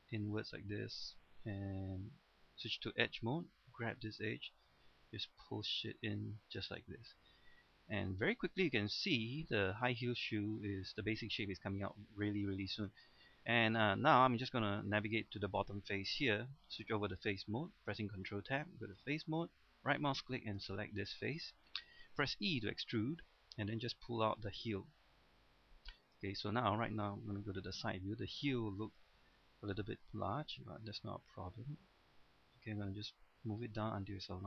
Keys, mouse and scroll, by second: 1.6 ctrl+Tab, 2.6 click, 2.9 middle click, 3.9 right click, 4.7-6.8 drag, 6.8 middle click, 7.8-9.8 shift+middle drag, 9.9 shift+middle click, 11.0-13.6 middle drag, 14.0 scroll up 1, 14.3-15.5 middle drag, 18.8 Tab, 18.9 click, 19.7 right click, 20.3 middle click, 21.5 scroll down 1, 21.7 middle click, 22.7 e, 26.1 click, 26.4 middle click, 27.5 KP_3, 28.3-29.0 scroll up 1, 29.1 shift+middle click, 30.3-34.4 drag.